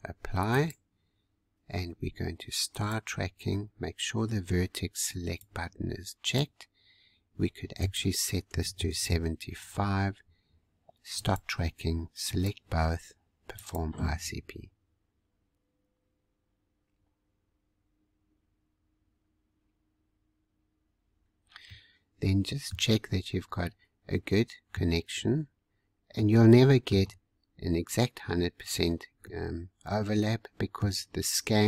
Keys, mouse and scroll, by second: 0.4-10.8 drag, 11.1-16.6 drag, 21.6-23.1 middle drag, 23.1-23.6 scroll up 1, 23.6-25.6 middle drag, 25.6-26.1 scroll down 2, 26.1 middle click, 27.0-29.2 scroll up 1, 29.2-31.6 middle drag.